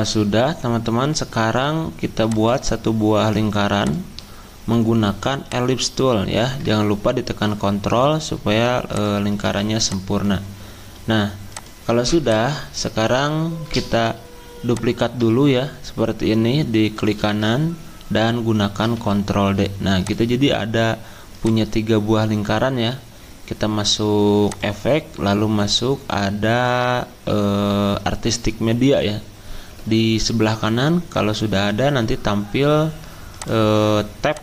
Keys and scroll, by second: 0.0-0.1 typing, 1.6 F10, 9.4 z, 18.8 ctrl+d.